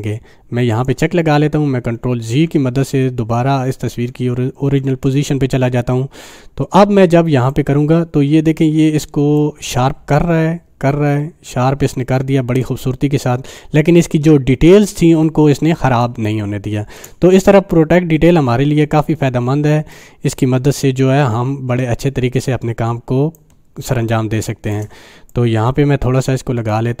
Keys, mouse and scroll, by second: 0.7 click, 1.8 click, 2.3 ctrl+alt+z, 7.7-12.8 drag, 16.0 space, 16.4 click, 16.5-17.2 space, 20.0-23.3 drag, 23.9 space, 24.1 click, 24.4-25.0 space, 25.3-27.0 drag.